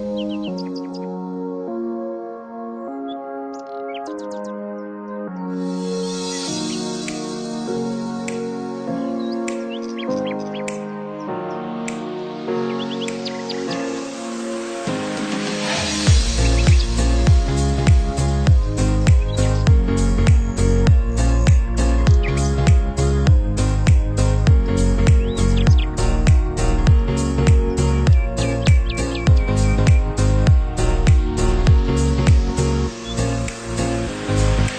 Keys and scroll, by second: 22.0 ctrl+c, 22.1 ctrl+v.